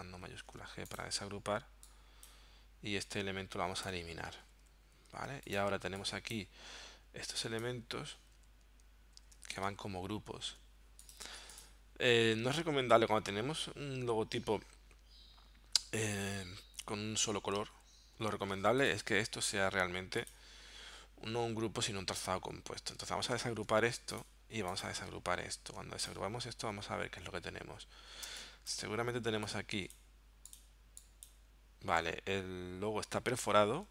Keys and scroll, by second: 0.6 shift+super+g, 3.9 BackSpace, 4.5 super+y, 5.1 super+y, 8.4 super+y, 9.2 super+y, 9.8 super+z, 17.8 super+y, 23.4 shift+super+g, 25.5 shift+super+g, 28.3 space, 33.6 super+z.